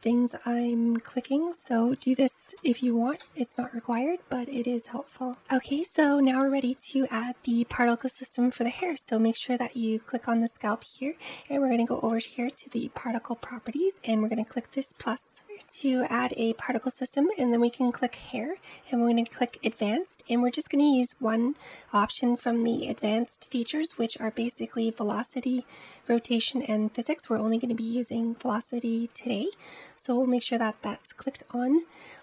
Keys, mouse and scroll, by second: 1.3-4.4 drag, 5.8-8.6 middle drag, 8.6 click, 12.5 click, 14.6-17.7 drag, 18.2 click, 20.3 click, 24.6-28.0 scroll down 7, 28.0 scroll down 3, 30.1-32.2 scroll up 9.